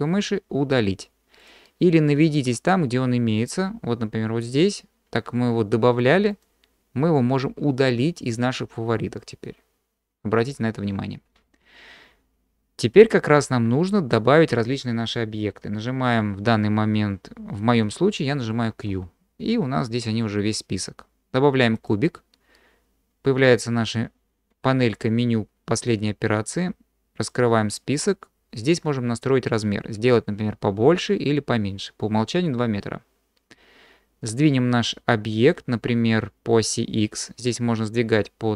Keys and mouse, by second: 2.6-10.8 drag, 18.9 q, 27.2 click, 30.3-34.3 drag.